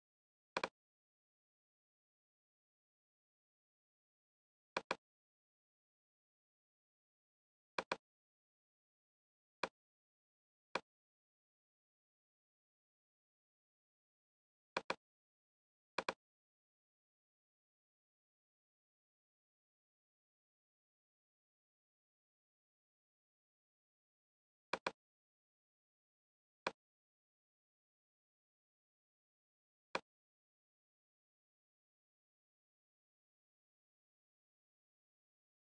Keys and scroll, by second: 11.9 BackSpace, 31.3 shift+a, 31.5 shift+f, 33.5 i, 34.7 Return, 35.1 shift+f.